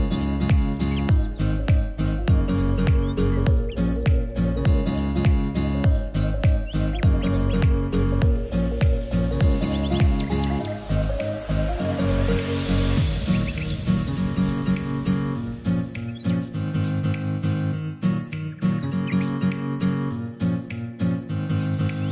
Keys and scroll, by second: 4.5 Delete, 9.2 Delete, 20.5-22.1 typing.